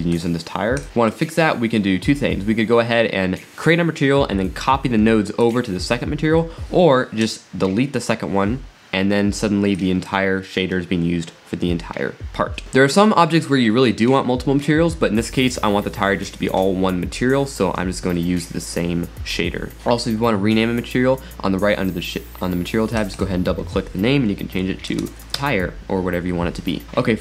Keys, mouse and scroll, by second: 0.1 click, 0.8 click, 1.1 click, 5.4-7.5 drag, 7.6-8.2 drag, 9.8-12.6 drag, 12.6 scroll up 3, 23.0-25.5 drag, 25.7 click, 26.8 scroll up 5.